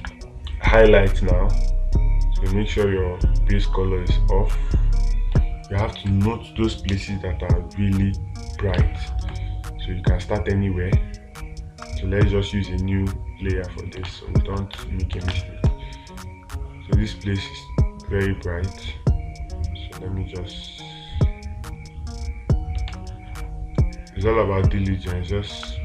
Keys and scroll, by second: 0.4 space, 5.8 space, 9.2 space, 14.5 space, 15.8 space, 23.3 space.